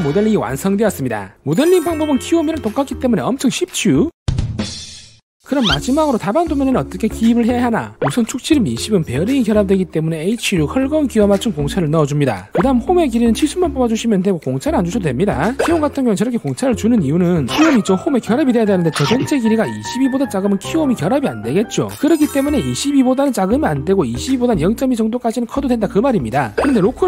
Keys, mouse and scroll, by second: 1.4 click, 2.3 scroll up 2, 2.7 shift+middle click, 3.2-4.1 shift+scroll up 2.